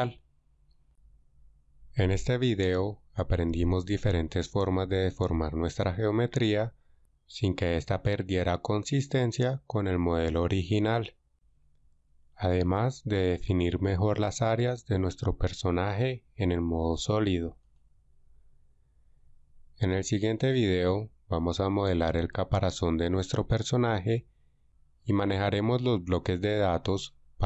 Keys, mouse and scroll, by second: 3.1 click, 11.0 f, 12.2 Tab.